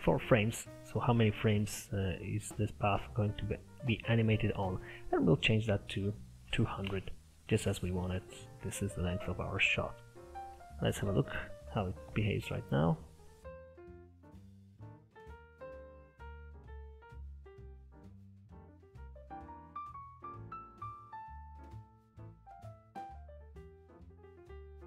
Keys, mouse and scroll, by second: 4.9-7.9 drag, 10.1-10.4 scroll down 1, 10.4 middle click, 11.2 click, 13.9 KP_0.